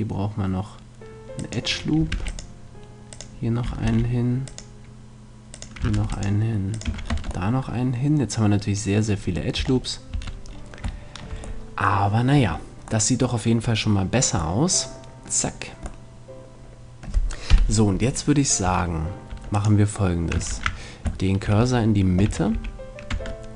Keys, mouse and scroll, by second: 1.5-5.2 drag, 2.1 ctrl+r, 3.8 ctrl+r, 6.0 ctrl+r, 6.0-7.5 drag, 6.8 a, 7.1 Tab, 7.5-9.6 middle drag, 9.6 Tab, 10.2 Tab, 17.5 KP_7, 18.7 Tab, 19.3 Tab, 19.6 click, 20.5 shift+c, 22.2 a, 22.5 a, 23.1 Tab.